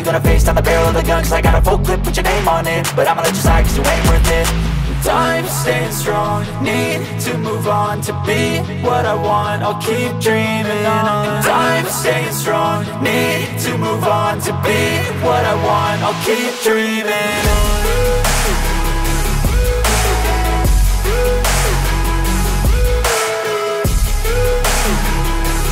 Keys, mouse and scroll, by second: 1.7 space, 2.8 ctrl+z, 3.0 shift+a, 4.9 shift+a, 5.4-6.4 drag, 6.8 click, 8.4 click, 9.0 middle click, 9.3 s, 10.1 g, 10.9 m, 12.7 shift+c, 13.0 shift+s, 14.1 s, 14.9 g, 15.8 click, 16.3 middle drag, 18.5-19.2 drag, 19.8 click, 20.9 middle drag, 22.0-23.0 shift+middle drag, 24.1-25.7 drag.